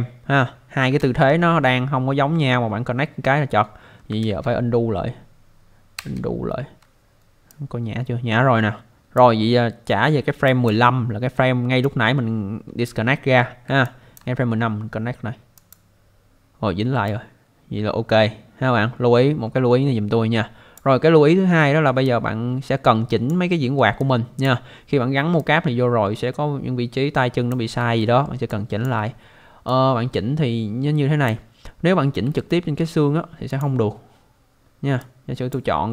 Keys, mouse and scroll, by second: 1.0 ctrl+z, 4.2 ctrl+z, 6.0 ctrl+z, 7.5 click, 10.5 click, 11.8 alt+click, 13.8 alt+click, 15.5 click, 17.1 click, 21.6 alt+middle click, 22.0 alt+click, 23.5 alt+middle click, 24.0 alt+click, 25.4 click, 28.0 alt+middle click, 28.5 alt+click, 29.7 click, 31.8-32.2 scroll up 1, 32.4 alt+middle click, 33.5 click, 34.0 scroll down 1, 35.0 click.